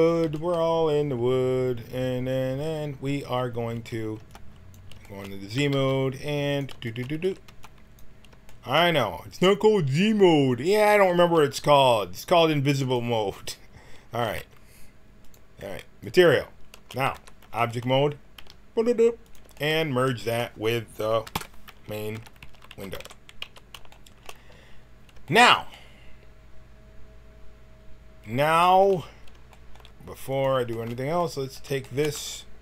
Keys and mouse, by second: 3.1 z, 3.7 a, 4.1 b, 5.5 g, 7.1 a, 7.4 b, 11.1 g, 14.1 z, 15.2 click, 17.1 Tab, 18.3 g, 20.2-21.3 drag, 21.3 ctrl+j, 22.1 Tab, 22.4 a, 22.6 a, 22.9 w, 23.4 a, 29.9 middle click, 30.2-32.0 drag, 32.0 middle click.